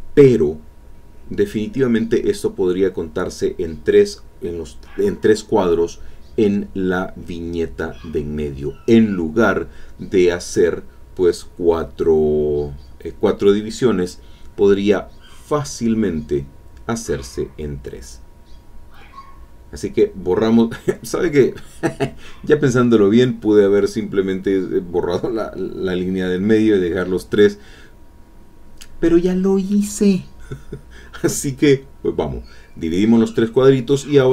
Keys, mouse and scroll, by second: 1.6-3.8 drag, 5.8 alt+Tab, 10.4 click, 11.3 shift+click, 11.7-14.7 shift+drag, 16.4-18.9 drag, 19.4-21.2 drag, 21.9 click, 23.1 click, 25.8-27.7 shift+drag, 29.1-30.8 shift+drag, 32.6 middle click.